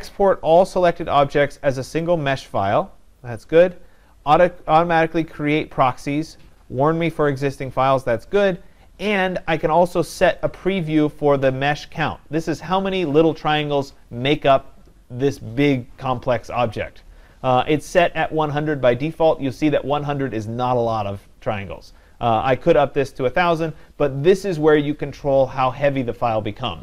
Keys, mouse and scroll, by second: 10.5-15.5 drag, 23.7-26.8 drag.